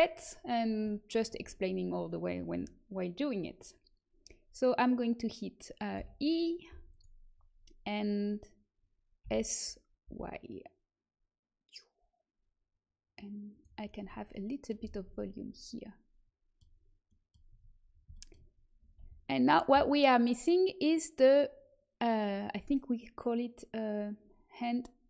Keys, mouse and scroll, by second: 5.9 e, 9.2 s, 13.7-15.0 middle drag, 15.0 a, 15.2 Tab, 17.4 Tab, 18.9 a.